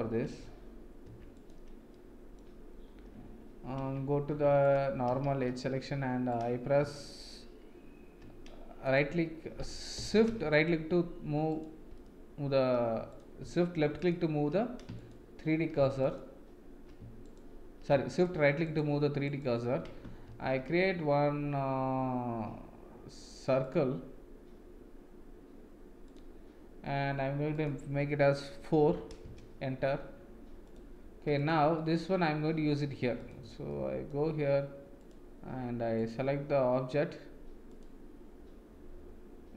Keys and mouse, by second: 0.2 Tab, 1.0 Tab, 1.3 click, 1.9-2.4 middle drag, 3.8 Tab, 4.3 Tab, 4.6 click, 5.2 shift+a, 6.3 click, 8.8 right click, 15.0 shift+click, 16.0 shift+click, 17.2 shift+right click, 18.1 shift+right click, 18.6 shift+right click, 19.3 shift+right click, 20.2 shift+a, 27.5-30.0 drag, 31.4 click, 31.7 middle click, 33.1 click, 33.7 middle click, 35.9-37.8 drag.